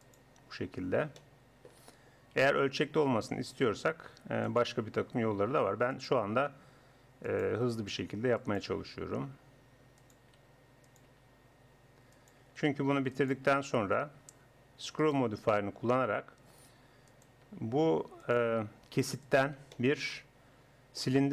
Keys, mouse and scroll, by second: 2.4 e, 4.9 e, 6.3 e, 7.5 e, 8.7 e, 10.2 e, 11.1 e, 12.4 e, 13.5 e, 15.3 e, 17.5 e, 18.5 e, 19.8-20.8 middle drag.